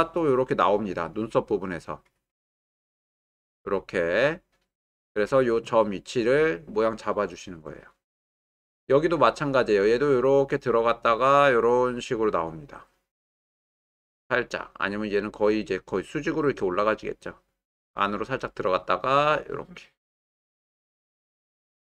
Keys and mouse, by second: 9.9-13.6 drag, 14.2-17.8 drag, 18.4 click, 18.8 click, 19.6 click, 19.9 click, 20.3 click.